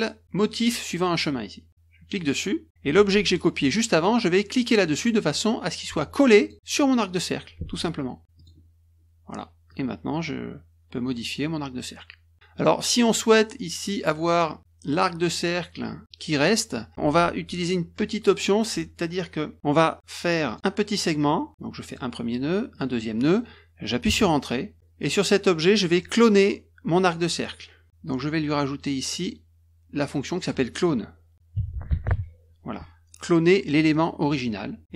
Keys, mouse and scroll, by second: 2.1 click, 6.4 click, 8.3 click, 9.7-12.3 drag, 20.4 click, 21.8 click, 22.7 click, 24.0 Return, 29.1 click, 30.3 click, 31.3-32.5 typing, 34.3 click.